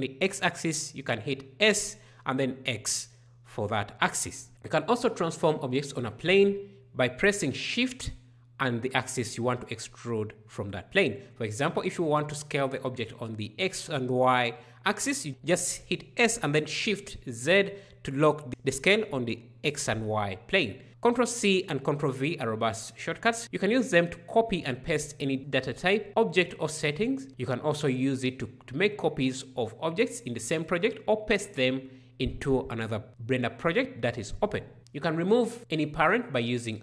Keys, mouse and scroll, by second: 34.8 alt+p.